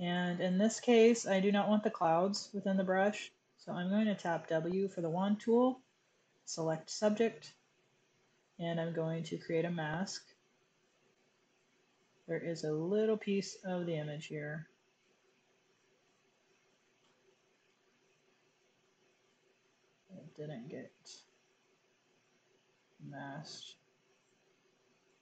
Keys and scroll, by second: 3.6 w, 11.9 z, 14.4 w, 16.6 w, 17.4 w, 25.1 super+x.